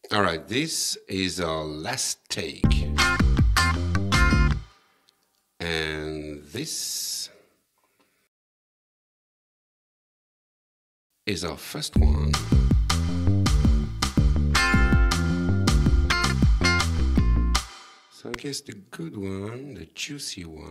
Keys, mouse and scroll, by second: 2.7 space, 4.6 space, 6.4 click, 6.8 click, 7.3 right click, 10.6 click, 12.0 space, 14.0 shift+click, 17.6 space, 18.3 click, 18.8 right click.